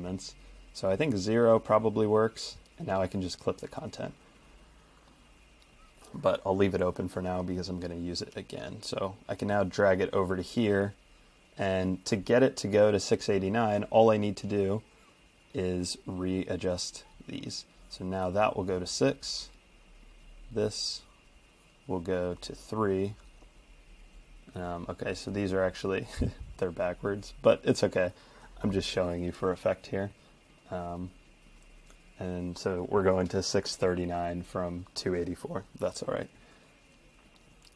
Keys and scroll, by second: 0.1 Page_Down.